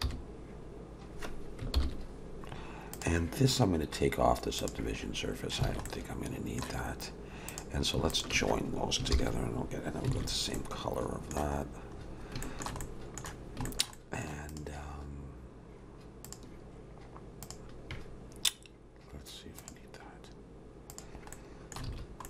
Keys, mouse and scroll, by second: 0.0 j, 1.8 ctrl+j, 2.9 click, 4.6 click, 5.1-5.6 scroll down 1, 5.7 alt+a, 5.8 middle click, 7.5 click, 8.1 shift+click, 9.1 ctrl+j, 10.2 alt+a, 10.3 scroll down 3, 10.5 middle click, 11.6-12.4 scroll up 6, 12.4 shift+middle click, 12.8 middle click, 13.6 shift+middle click, 13.9 middle click, 14.5 click, 16.2 click, 19.6 click, 20.9 click, 21.3 middle click, 21.9 alt+a, 22.2 scroll up 1.